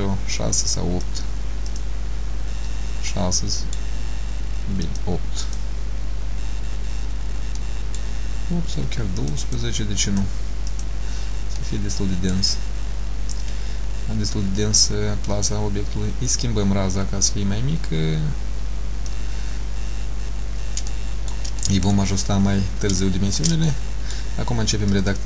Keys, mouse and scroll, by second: 1.1 click, 1.8 click, 3.2 middle click, 4.9 click, 5.5 click, 7.2-7.6 scroll down 3, 7.6 middle click, 9.3 click, 10.2 click, 11.7 middle click, 13.4 click, 20.5-20.9 scroll up 1, 21.0 shift+middle click, 21.0 scroll up 2, 21.8 middle click, 23.1 shift+middle click, 23.8 middle click, 25.0 click.